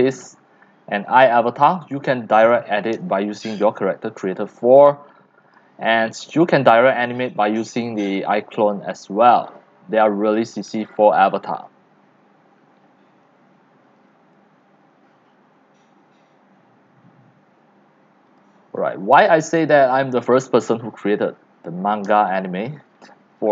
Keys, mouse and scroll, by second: 2.1 x, 2.8-4.4 drag, 6.2-6.6 scroll down 4, 7.0-12.1 typing, 7.7 click, 8.3 click, 9.6-9.9 scroll up 6, 11.6-13.6 drag, 14.1 click, 18.2-23.5 drag.